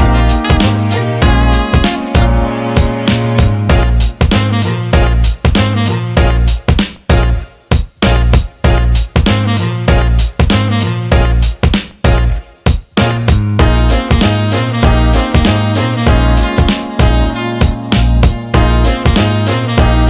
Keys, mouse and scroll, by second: 0.6 alt+middle click, 1.8 alt+shift+middle click, 3.3-4.0 alt+middle drag, 4.9-5.7 right drag, 6.6 click, 7.6 alt+shift+middle drag, 8.0 alt+middle click, 8.9 click, 9.6 alt+middle click, 10.2 ctrl+alt+middle click, 10.7-17.8 alt+middle drag.